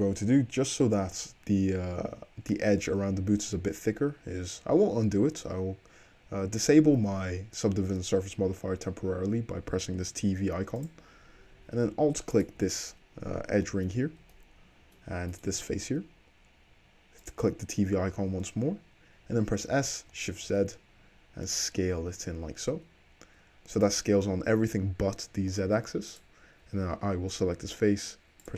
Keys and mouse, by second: 10.9 click, 11.0-12.4 middle drag, 12.4 alt+click, 12.5-14.7 alt+middle drag, 14.7 click, 15.1 shift+middle click, 17.3 click, 19.7 s, 20.2 shift+click, 20.7-22.0 middle drag, 22.0-23.9 shift+drag, 26.2 click, 27.6 s.